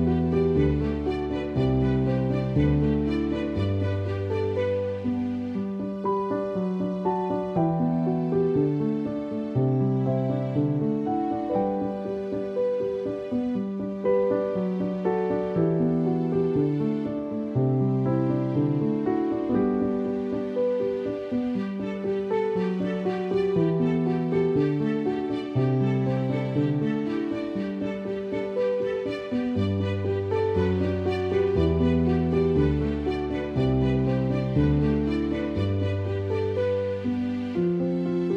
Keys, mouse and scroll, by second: 0.4 space, 0.5 click, 0.7 space, 3.5 right click, 4.2 click, 4.5 space, 4.7 click, 4.8 space, 6.1-9.2 typing, 9.0 click, 10.1-15.6 drag, 15.6 space, 15.7 click, 16.0 space, 16.3-23.4 drag, 19.5-20.3 typing, 23.4-24.4 typing, 23.5 click, 24.6-29.8 drag, 29.8 space, 29.9 click, 30.2 space, 30.5-33.1 drag, 33.1 space, 33.3 click, 33.5 space, 33.6 click, 34.6 space, 34.7 click, 35.0 space.